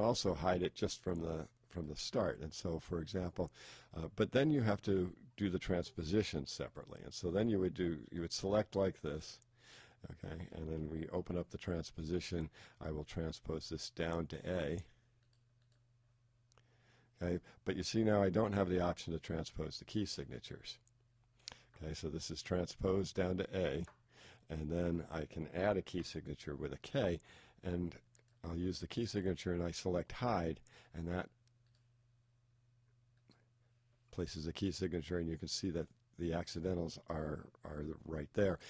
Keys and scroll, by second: 11.1 shift+t.